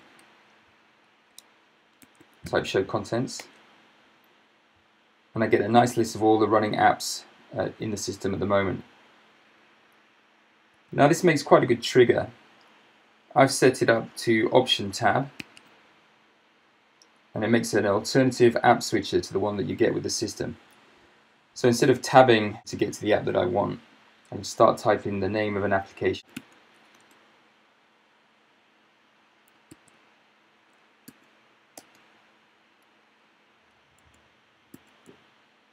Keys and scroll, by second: 0.0-0.3 typing, 1.4 Tab, 1.8-3.0 typing, 3.5 Return, 11.2 Escape, 15.5 alt+Tab, 26.0-26.9 typing, 27.2 Return, 27.8 Return, 29.8 alt+Tab, 31.1 typing, 31.8 Return, 32.5 t, 34.7 ctrl+7, 35.0 ctrl+7.